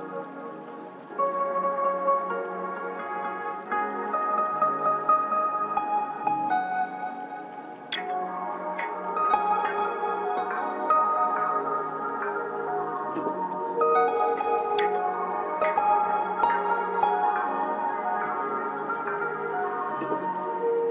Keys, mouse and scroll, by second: 0.3-2.3 drag, 2.3 right click, 3.0 click, 3.8-4.8 scroll up 1, 5.7 ctrl+k, 7.2-10.9 drag, 10.9 ctrl+q, 11.6 click, 12.4 typing, 14.3 right click, 15.1 click, 18.1-18.6 scroll up 1, 18.6 click, 19.6-20.9 ctrl+drag.